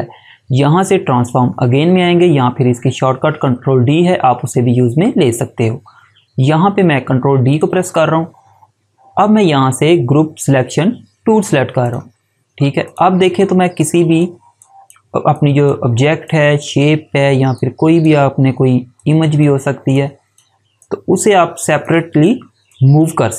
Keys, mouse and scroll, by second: 7.4 click, 11.7 click.